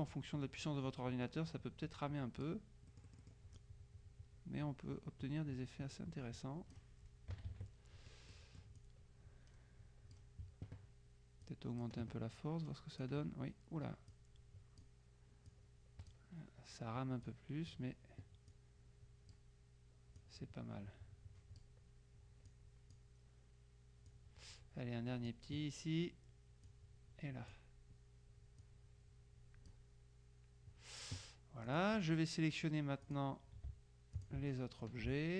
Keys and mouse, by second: 3.0 click, 3.2 click, 7.5 KP_Subtract, 8.5 click, 11.5 click, 14.2 click, 15.6 click, 17.3 click, 18.6 click, 20.3-22.2 drag, 22.6 click, 24.2-25.9 drag, 26.7 click, 28.7-30.3 drag, 31.7 click, 33.1 click, 34.2 shift+click.